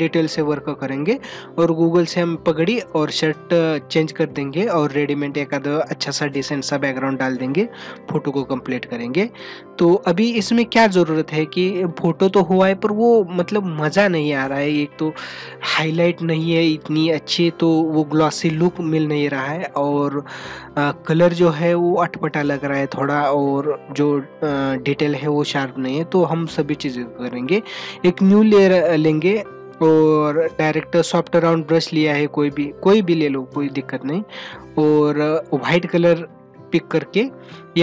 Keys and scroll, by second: 9.5 ctrl+-, 19.7 ctrl+-, 37.5 ctrl+-.